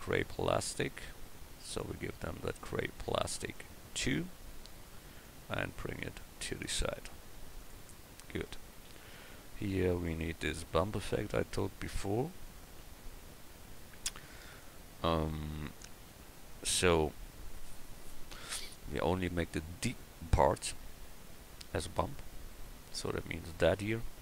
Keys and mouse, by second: 3.6 drag, 4.1 click, 6.8 s, 8.9 a, 11.3 KP_1, 21.1-24.2 middle drag.